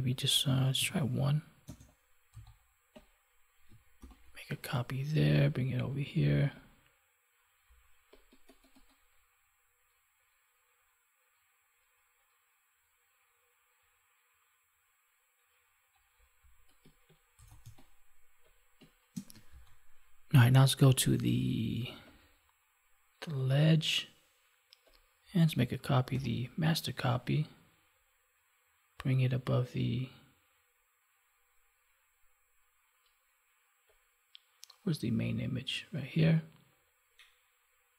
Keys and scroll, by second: 3.9 ctrl+j, 17.5 space, 19.4 ctrl+s, 26.0 ctrl+j.